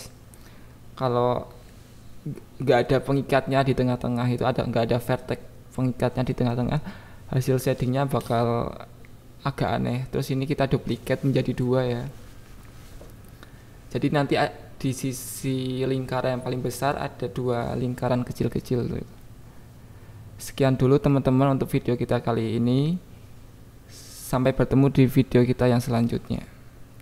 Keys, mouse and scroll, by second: 0.1 shift+d, 0.3 click, 2.6 click, 2.8 click, 3.2-4.5 drag, 5.5 click, 5.7 click, 6.2 Tab, 6.3 a, 6.7 g, 6.8 y, 7.9 click, 8.2 s, 9.1 click, 9.5 g, 9.6 y, 9.9 click, 10.0 Tab, 10.3 click, 11.8 click, 12.7 click, 13.5 click, 14.9 click, 15.9 click, 17.5 KP_7, 17.9 click, 18.4 click, 19.3 KP_3, 19.7 r, 21.9 BackSpace, 22.4 KP_Add, 23.2 KP_9, 23.3 KP_0, 23.7 click, 24.6-27.0 drag.